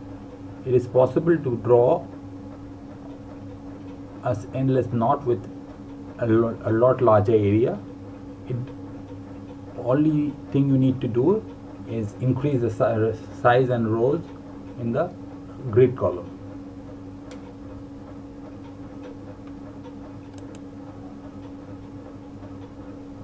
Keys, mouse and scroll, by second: 0.2 click, 1.6 Delete, 4.0 click, 5.1 Delete.